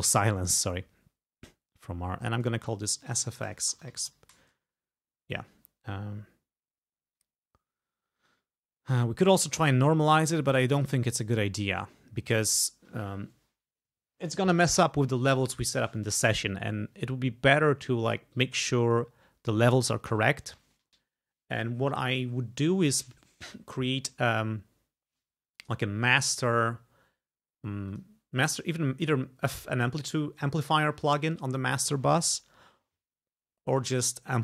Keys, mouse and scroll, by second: 2.4 click, 2.7-4.6 typing, 10.9 click, 25.6 click, 28.0 click.